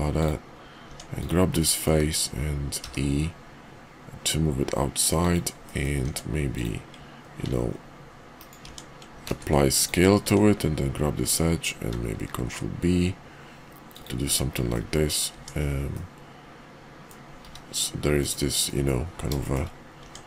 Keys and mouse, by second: 0.8 Tab, 1.2 click, 1.6 middle click, 2.7 e, 5.6 middle click, 6.0 Tab, 6.5 click, 7.4 ctrl+b, 8.6 Tab, 9.2 ctrl+a, 10.2 Tab, 12.2 ctrl+b, 14.2 `, 14.7 middle click, 15.3 Tab, 15.9-17.1 middle drag, 17.4 `, 18.1 KP_5, 18.7 middle drag, 19.4 shift+middle drag, 20.0 Tab.